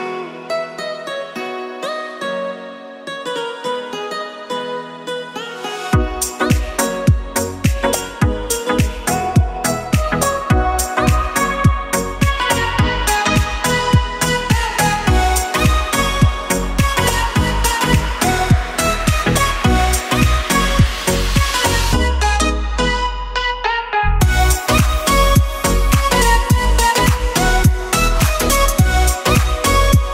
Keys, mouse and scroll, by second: 2.1 ctrl+click, 3.0 ctrl+click, 3.5 shift+click, 3.6 shift+click, 4.7 click, 6.8 click, 7.2-7.6 scroll down 4, 7.6 KP_1, 8.5 click, 9.0 click, 10.3 Tab, 10.9 a, 11.4 s, 19.4 click, 20.0-20.4 scroll up 5, 20.4 click, 21.2 click, 22.1-22.6 scroll down 2, 23.1 Tab, 23.8 click, 25.2 Tab, 25.9 a, 26.5 s, 28.3 Tab, 29.1 click.